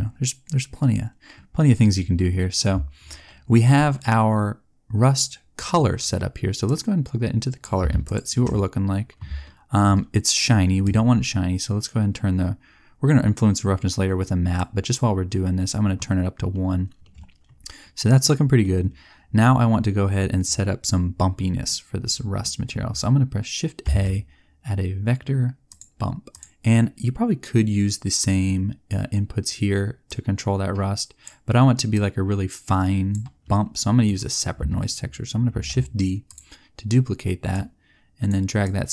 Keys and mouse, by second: 6.6 click, 23.8 shift+a, 33.4 click, 35.4 shift+d.